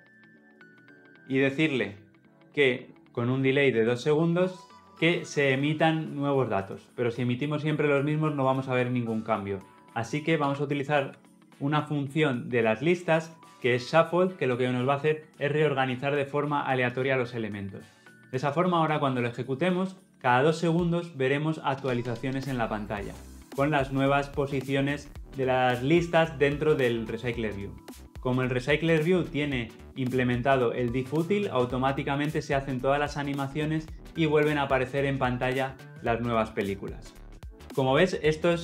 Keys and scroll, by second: 3.5 Return, 12.0 Return, 18.5 shift+F10.